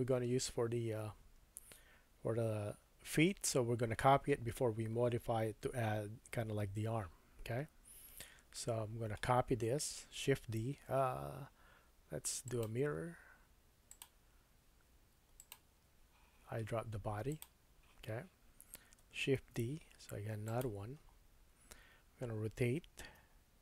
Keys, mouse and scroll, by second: 7.5-8.4 scroll down 2, 8.5 shift+middle click, 8.6-15.5 shift+drag, 15.5-19.0 middle drag, 19.4 shift+d, 20.4 middle click, 21.0-22.4 scroll down 2, 22.4-22.8 scroll down 1, 23.0 r.